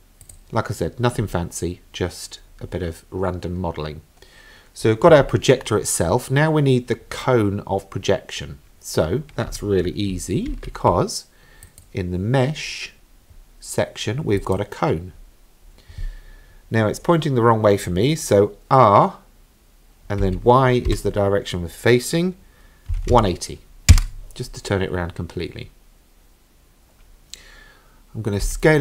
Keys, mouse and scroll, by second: 0.2 click, 1.2 scroll up 2, 2.6-3.2 scroll down 2, 3.2-5.3 scroll up 1, 10.5 shift+a, 20.2 r, 28.4 s.